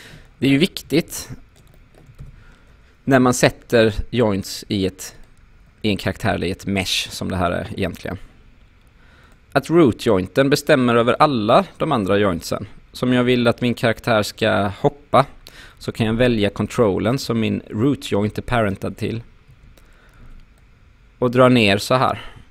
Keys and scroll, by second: 2.2 q, 19.5 w.